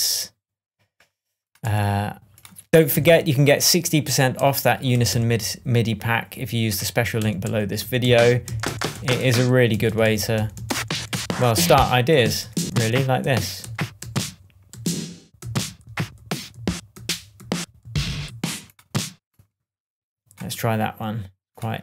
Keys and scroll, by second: 1.6 Left, 2.9 Up, 4.3 Up, 4.9 Down, 5.1 Right, 7.2 Up, 7.8 Right, 8.0 Down, 8.9 Up, 9.8 Up, 10.3 Right, 10.5 Down, 13.6 Up, 15.3 Down.